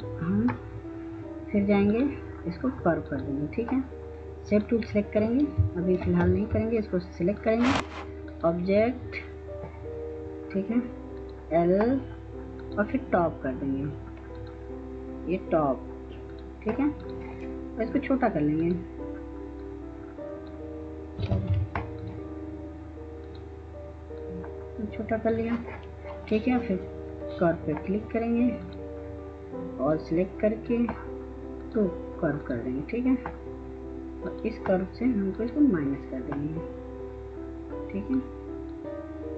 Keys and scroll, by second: 6.1 ctrl+space, 21.2 ctrl+z.